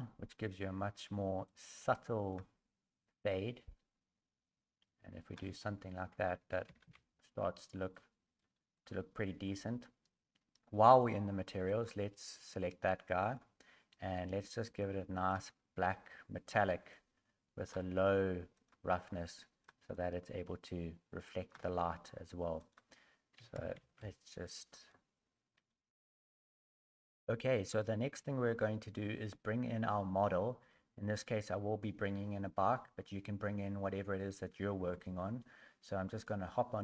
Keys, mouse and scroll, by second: 25.9 shift+middle click, 29.5 middle click, 30.7 middle click.